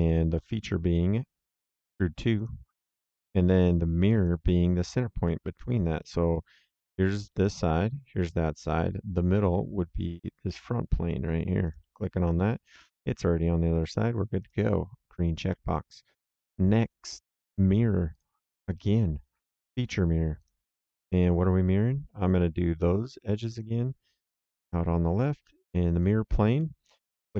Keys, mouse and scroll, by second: 0.3 click, 2.3 click, 4.1 click, 5.2 middle click, 6.3 middle click, 8.4 right click, 11.6 click, 14.3 click, 18.0 click, 19.5 click, 23.4 click, 25.9 click, 26.5 middle click, 27.1 right click.